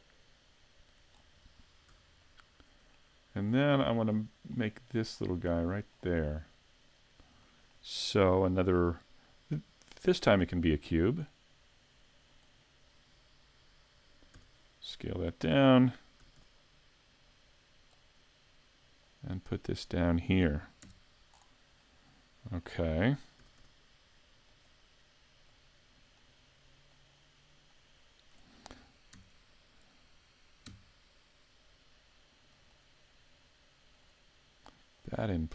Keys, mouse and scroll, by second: 1.2-1.9 scroll down 2, 1.9 a, 2.2 middle click, 3.5-4.1 scroll up 3, 4.1 scroll up 4, 4.6 middle click, 5.2 scroll up 2, 5.6 middle click, 7.4 middle click, 10.1 shift+a, 14.4 s, 15.4 click, 16.2 s, 18.1 click, 19.2 click, 20.8 KP_Decimal, 21.3-21.8 scroll down 3, 21.8 middle click, 23.4 s, 25.5 click, 26.9 click, 29.2 KP_3, 30.7 KP_5, 32.5 click, 35.0 click.